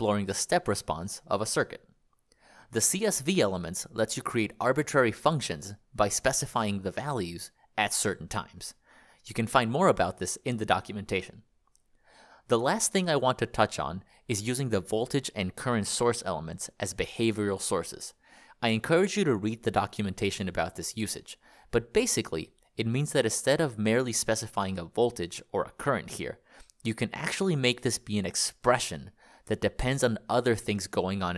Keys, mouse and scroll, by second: 2.1 Escape, 3.9 click, 6.3 click, 6.9 click, 9.2 click, 12.5 click, 14.6 ctrl+click, 23.1 click, 29.0 BackSpace.